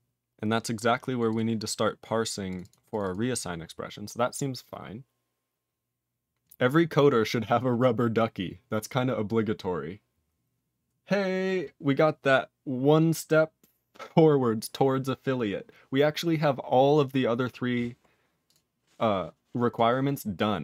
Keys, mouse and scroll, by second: 1.2 click, 1.3 click, 1.9 click, 2.5 click, 2.5 click, 2.6 double click, 2.7 double click, 2.9 click, 2.9 click, 3.0 double click, 3.1 double click, 3.3 click, 3.4 click, 6.6 scroll up 2.